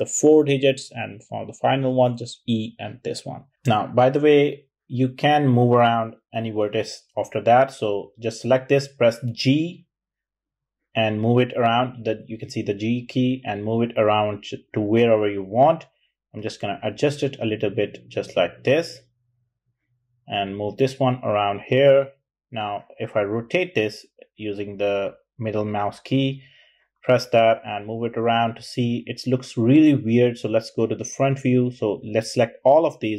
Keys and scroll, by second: 1.5 typing, 8.5 typing, 9.8 typing, 11.1 typing, 20.2 typing.